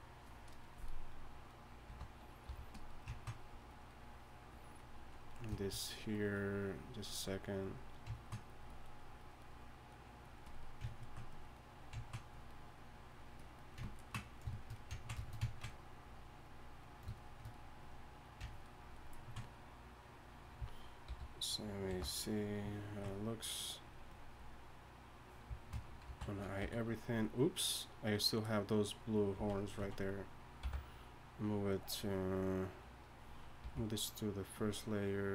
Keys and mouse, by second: 1.9 g, 2.5 f, 3.4-5.1 drag, 5.3 click, 13.8 click, 21.2 alt+h, 21.9 alt+m, 23.7-24.7 drag, 26.0 alt+h, 26.6 a, 29.2 click, 29.4 z, 29.8 z, 30.6 m, 33.6 m.